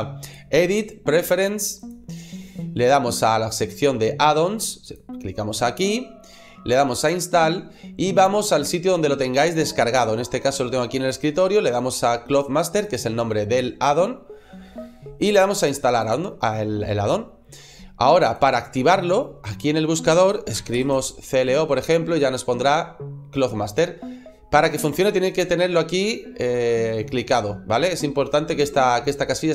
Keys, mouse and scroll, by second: 0.1 click.